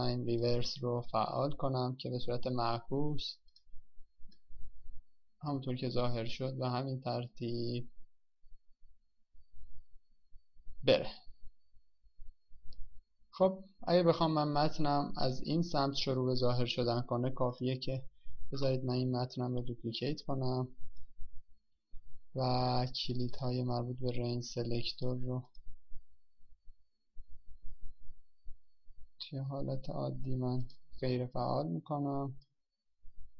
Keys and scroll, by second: 21.4 ctrl+d.